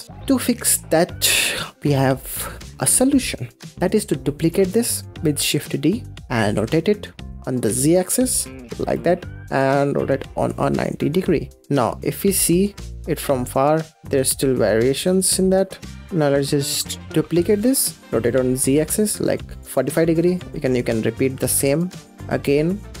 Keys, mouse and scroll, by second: 0.0 middle click, 2.0 click, 2.5 scroll down 3, 2.9 scroll up 4, 3.8-4.5 middle drag, 4.5-5.1 scroll down 5, 5.1-5.4 middle drag, 5.4 shift+d, 11.5 click, 11.6-12.2 middle drag, 12.2-12.6 scroll down 6, 12.6-13.2 middle drag, 13.2 scroll up 4, 13.5-14.0 middle drag, 15.1-15.9 middle drag, 15.9 scroll down 4, 16.1 f, 16.2 g, 17.2 shift+d, 19.9-21.4 middle drag, 21.4 shift+r, 21.9-23.0 middle drag.